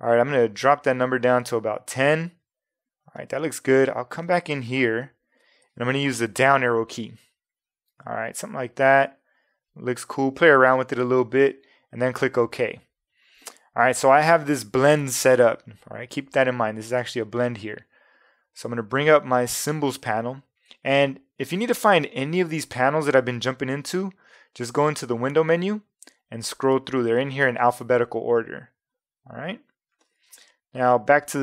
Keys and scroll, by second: 0.9 1, 1.2 0, 1.7 Tab, 6.3 Down, 7.9 Up, 14.4 v.